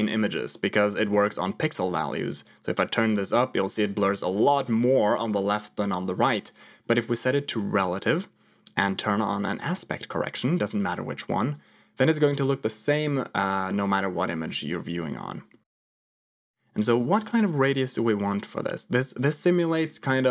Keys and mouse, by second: 1.0 middle click, 1.9-3.8 shift+drag, 7.6 click, 9.6 click, 11.5 click, 16.0-19.8 shift+drag.